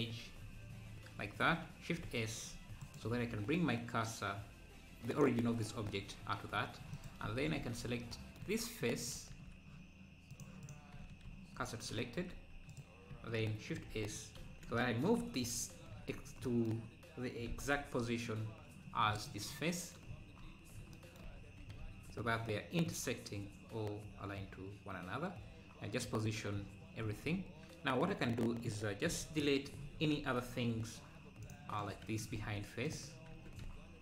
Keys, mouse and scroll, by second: 2.0 shift+s, 2.4 shift+s, 4.1 Tab, 5.2-7.1 right drag, 7.1 click, 7.6 Tab, 9.1 click, 10.3-11.6 drag, 11.6 shift+s, 13.9 shift+s, 17.5 g, 19.5 scroll down 2, 20.1-20.4 scroll up 3, 20.4 `, 21.5 g, 26.3 `, 29.1 KP_7, 29.9 z, 31.5 Left, 32.2 Left, 32.9 x, 33.3 Tab.